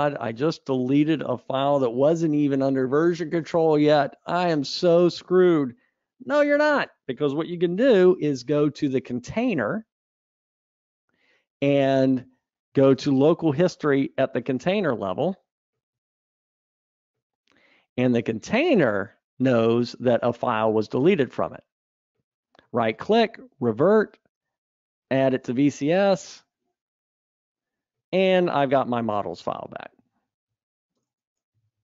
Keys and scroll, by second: 8.2 super+Up, 29.7 super+Up.